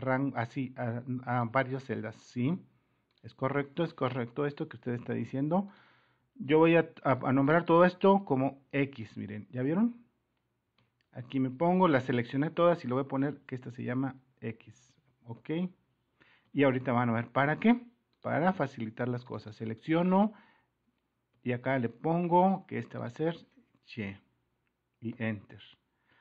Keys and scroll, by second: 4.0 super+-, 4.2 Escape, 16.5-18.2 typing, 19.6 typing.